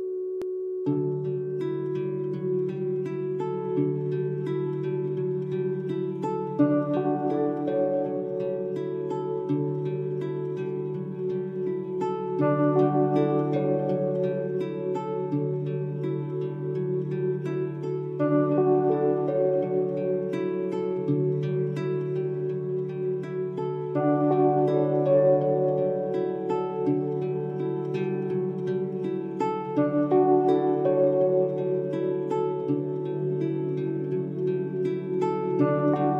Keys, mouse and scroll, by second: 4.9 scroll up 1, 6.3-7.7 alt+shift+drag, 14.1-14.7 alt+shift+click, 16.7-17.2 alt+shift+click, 18.4 space, 18.5-19.3 click, 18.7 space, 20.5 click, 22.3 click, 28.8-29.8 scroll down 1, 29.8 click, 32.6-33.4 drag.